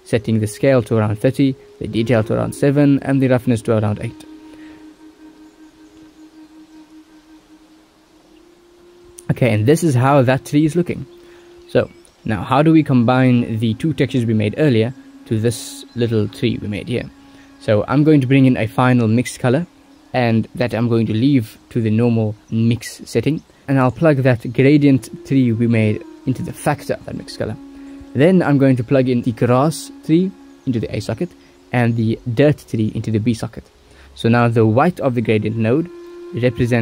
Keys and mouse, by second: 3.7 ctrl+s, 15.8 ctrl+s, 16.7 g, 17.2 click, 18.5 shift+d, 20.4-22.2 drag, 22.9-24.7 drag, 26.6-30.5 drag, 31.3-33.5 drag, 34.9 ctrl+s, 35.5-36.8 drag.